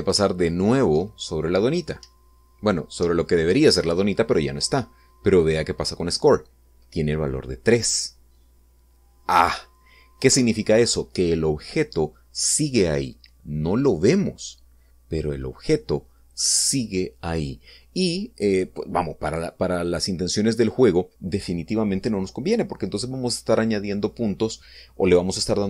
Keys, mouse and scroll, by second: 2.9 Up, 11.1 Escape, 20.9 click.